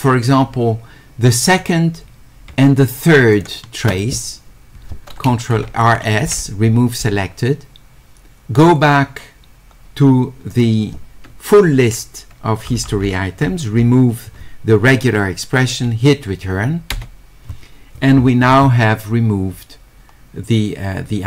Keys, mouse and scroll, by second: 1.6 click, 3.3 ctrl+click, 5.4-6.4 typing, 10.6 click, 19.7-20.5 scroll down 2, 20.5-21.1 scroll up 2, 21.1-21.2 scroll down 2.